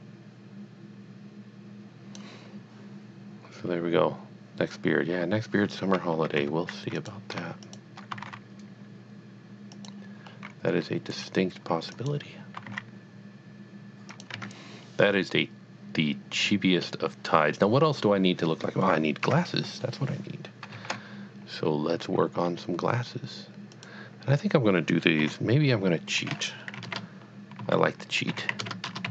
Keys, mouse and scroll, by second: 6.4 Tab, 7.0 click, 7.6 shift+click, 8.1 g, 8.2 z, 9.7 click, 10.3 scroll up 1, 11.9 click, 12.5 g, 12.6 z, 14.2 click, 14.5 Tab, 14.6-15.1 scroll down 1, 15.1 middle click, 15.4 middle click, 17.1 middle click, 19.2 KP_1, 20.8 shift+a, 23.7 a, 23.7 click, 25.2 KP_3, 26.8-29.1 typing.